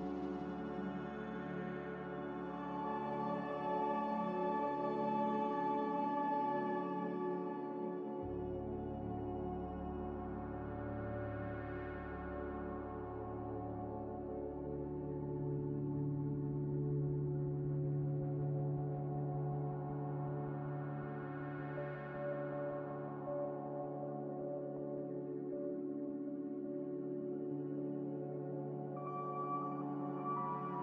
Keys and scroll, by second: 3.5 F9, 4.3 s, 5.5-7.4 typing, 8.3 Tab, 8.9 Return, 11.2 a, 13.7 x, 16.3 z, 17.3 F9, 25.7-26.4 typing, 27.5 ctrl+z.